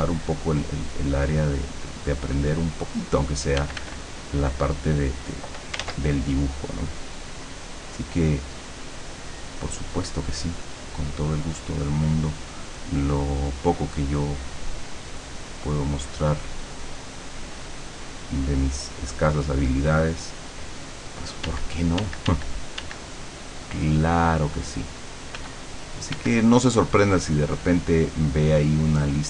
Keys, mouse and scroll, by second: 3.6 f, 4.1-5.5 drag, 5.9 ctrl+z, 6.1-11.1 ctrl+drag, 11.9-17.5 drag, 21.5 d, 23.2-25.9 drag, 25.4 f, 26.1 f, 26.5-29.2 drag.